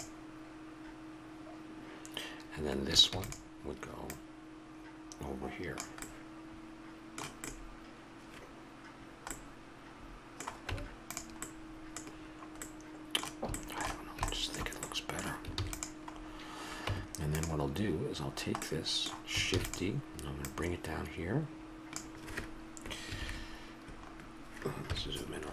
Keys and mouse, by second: 3.1 shift+d, 6.0-10.7 middle drag, 10.7 Tab, 15.5 ctrl+s, 16.8 Tab, 19.5 shift+d, 24.8 KP_Decimal.